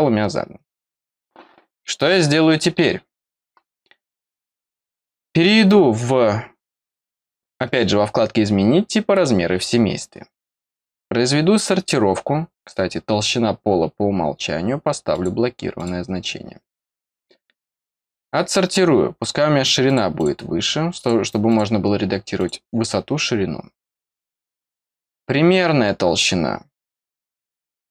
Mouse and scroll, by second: 9.1 click, 10.6-11.9 middle drag, 15.1 click, 15.7 click, 18.1 click, 19.8 click, 20.1 click, 20.9 click, 21.4 click, 22.3 click, 24.6 click.